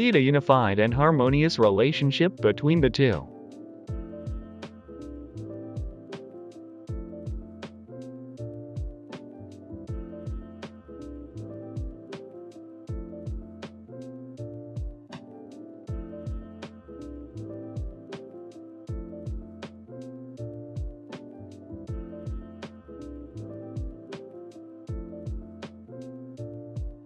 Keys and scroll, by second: 0.3 typing, 0.4 Return, 3.7-8.1 typing, 5.7 Escape, 11.8 Tab, 11.9 Return, 13.8 ctrl+z, 14.0 ctrl+z, 14.1 ctrl+z, 17.4 0, 17.4 Tab, 17.5 Tab, 17.5 Return, 18.1 ctrl+z, 19.1 Delete, 19.5 ctrl+z, 21.9 typing, 23.5 g, 24.2 g, 24.2 z, 26.6 g, 26.7 x.